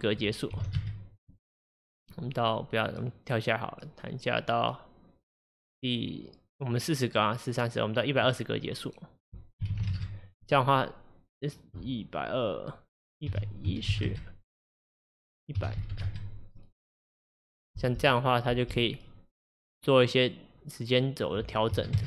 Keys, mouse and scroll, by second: 9.2-16.1 drag, 16.0 KP_0, 17.8 space, 18.6 space, 19.2-22.0 drag.